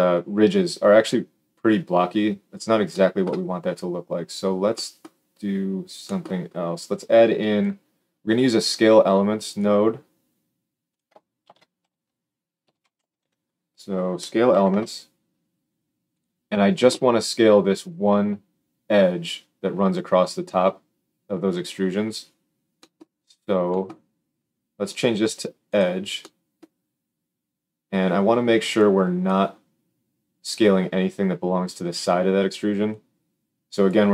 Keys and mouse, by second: 9.5-10.8 middle drag, 10.8 click, 10.9-24.8 shift+middle drag, 11.4 shift+a, 24.8-34.1 drag.